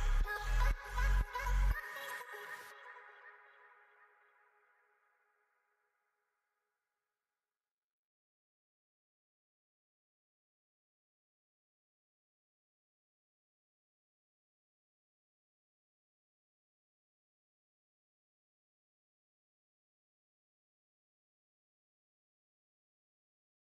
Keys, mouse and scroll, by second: 2.2 shift+click, 3.2 t, 10.3 shift+click, 11.0 t, 12.2 shift+click, 19.0 shift+click, 19.3 shift+double click, 19.8 shift+click, 22.1 ctrl+g.